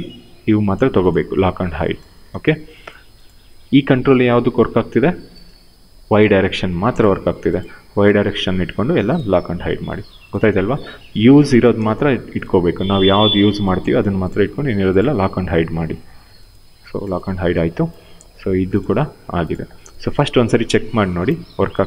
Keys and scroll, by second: 2.0 w, 3.7 e, 5.1 ctrl+z, 21.5 w.